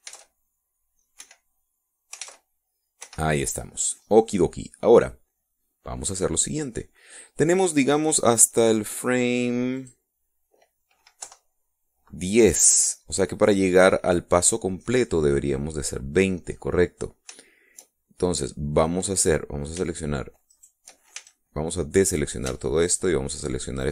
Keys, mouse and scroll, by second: 0.2 click, 1.2 alt+a, 2.3 Escape, 3.8 alt+a, 4.2 Escape, 6.0 middle click, 6.0-6.3 scroll down 2, 6.8 middle click, 6.8-7.2 scroll down 2, 7.6 middle click, 7.6 scroll down 2, 10.9 click, 12.4 Left, 16.5-17.6 scroll down 4, 21.7 shift+right click, 22.3 shift+a.